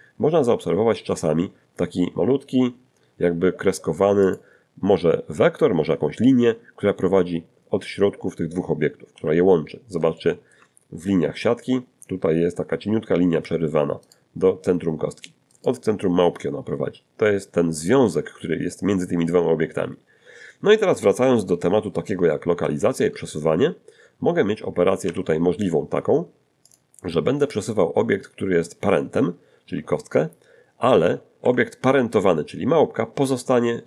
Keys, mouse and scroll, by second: 4.3 click, 9.1 z, 10.1 shift+middle click, 14.1 right click, 15.5 right click, 21.2 z, 22.3 shift+middle click, 25.1 g, 26.7 click, 27.5 right click, 29.7 g, 31.4 Escape, 33.4 click.